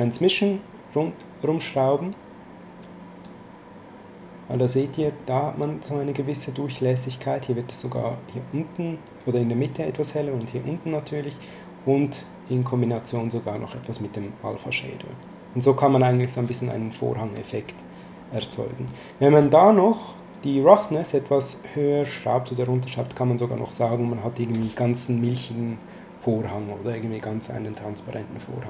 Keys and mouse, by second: 4.5 middle click, 12.2 click, 18.9 middle click, 20.3 click, 27.7 click.